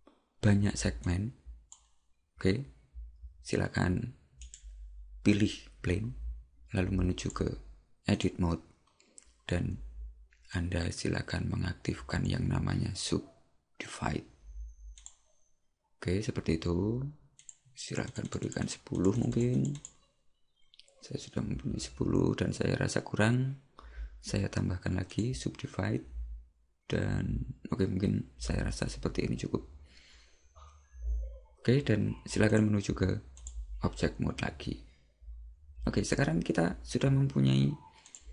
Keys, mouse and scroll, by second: 1.1 click, 4.5 right click, 7.3 click, 15.0-23.3 click, 25.1 click, 32.5 click, 38.1 click.